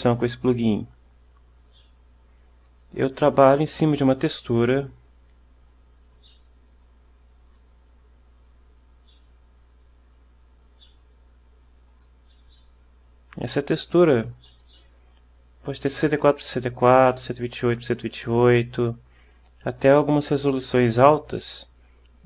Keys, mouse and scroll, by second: 4.3 click, 5.8 click, 7.0 click, 12.0 click, 14.6 click.